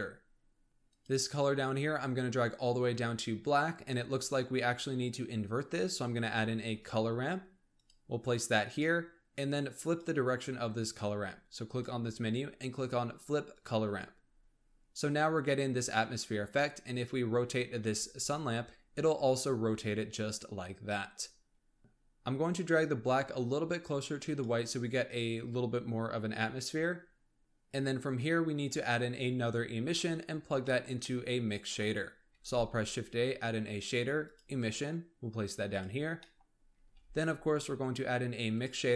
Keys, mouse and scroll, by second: 0.6 middle click, 0.8 click, 6.2 shift+a, 9.5-14.2 drag, 14.2-14.8 scroll up 2, 14.8-16.8 scroll up 1, 16.8 click, 17.3-17.8 scroll down 3, 17.8 r, 21.8-22.6 scroll up 3, 22.6-25.7 drag, 26.9-27.4 scroll down 4, 27.4 click, 30.0-30.6 scroll down 7, 30.6-32.3 middle drag, 32.3 shift+a, 36.2-36.8 middle drag, 36.8 shift+a.